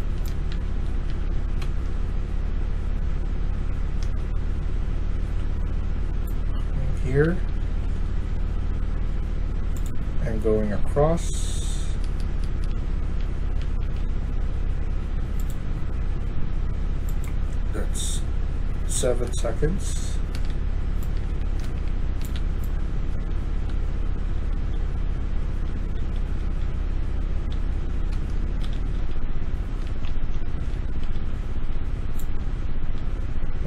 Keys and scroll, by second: 0.0-1.2 typing, 3.7-4.4 typing, 6.6-8.2 typing, 10.3-12.6 a, 13.0 a, 13.4 a, 13.7 a, 18.8-31.0 typing, 19.2 Return, 32.3 typing.